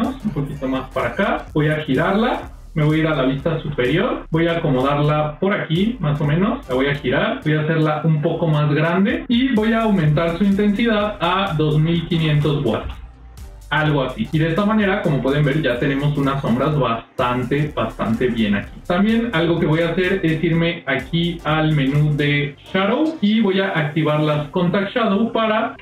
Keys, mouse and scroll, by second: 0.2 scroll up 1, 1.2 f, 1.4 g, 3.5 KP_7, 4.1 shift+middle click, 4.7 g, 6.5 r, 10.8-13.1 drag, 12.2 KP_0, 21.7-24.4 drag, 25.0 middle click.